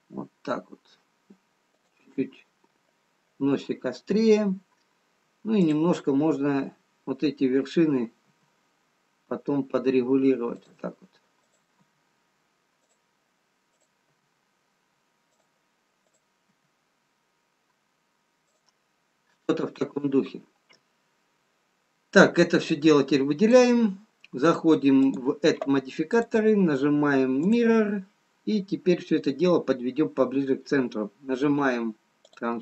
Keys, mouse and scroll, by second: 6.0 click, 8.7 g, 11.9 click, 12.3 g, 14.4 click, 14.6 g, 16.5 click, 16.9 g, 23.1 click, 25.5 click.